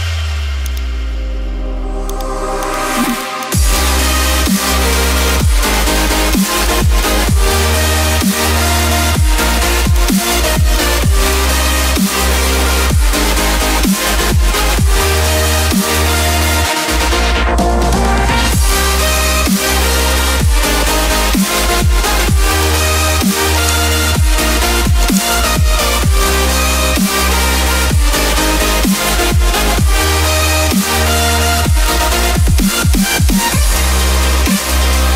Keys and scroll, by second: 8.1 ], 8.3 ].